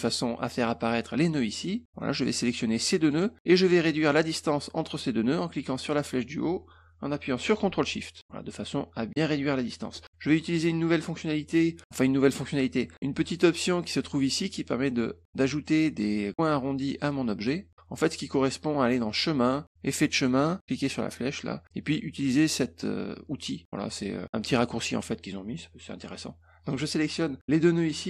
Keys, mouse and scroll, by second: 2.2-3.1 drag, 3.6 middle click, 5.6-9.1 drag, 19.1 click, 19.8 click, 20.7 click, 26.1 click, 27.5 click.